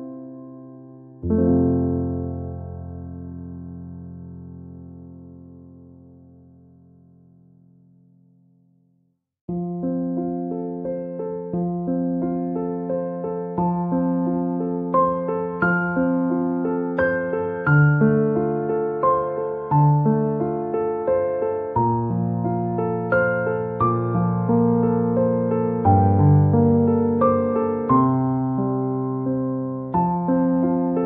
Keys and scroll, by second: 17.8 ctrl+=, 22.9 ctrl+-.